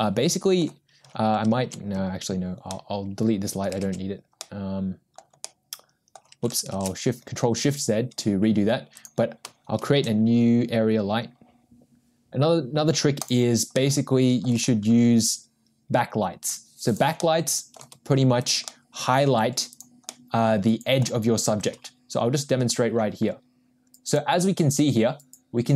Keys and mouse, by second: 2.6 ctrl+z, 5.5 ctrl+z, 5.5-6.5 middle drag, 7.6 ctrl+shift+z, 8.9 click, 9.9 shift+a, 13.8-14.6 middle drag, 14.6 g, 18.7 middle click, 19.4 g, 20.4-21.4 middle drag, 21.5 r.